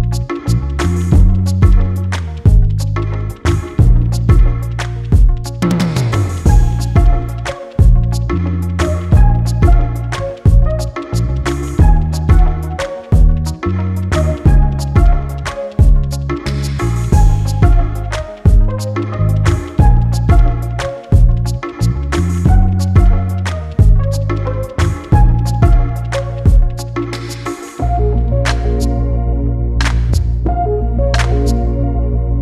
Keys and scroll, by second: 11.1 [, 11.8 [, 15.2 [, 31.5 ctrl+z, 32.0 ctrl+alt+z.